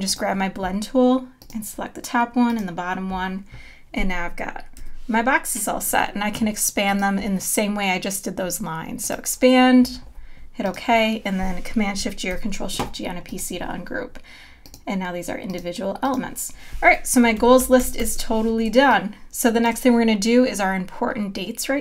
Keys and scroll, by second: 4.8 v, 12.3 shift+super+g, 17.6 super+-, 18.7 space.